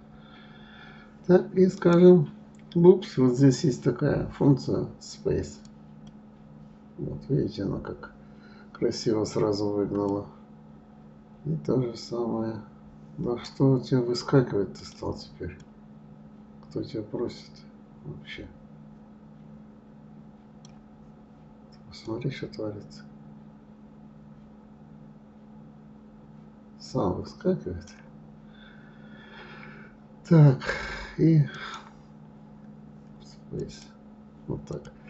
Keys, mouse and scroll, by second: 2.1-5.1 right drag, 10.3-12.2 drag, 12.2 right click, 13.3 right click, 15.1 click, 15.9-17.8 drag, 18.1-19.8 right drag, 20.9-22.3 right drag, 22.3-25.0 drag, 29.1 scroll up 1, 31.8-34.8 right drag.